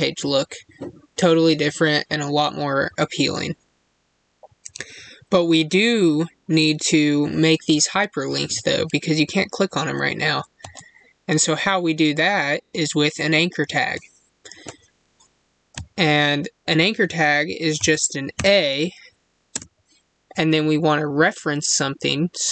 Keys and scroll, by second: 19.4 space.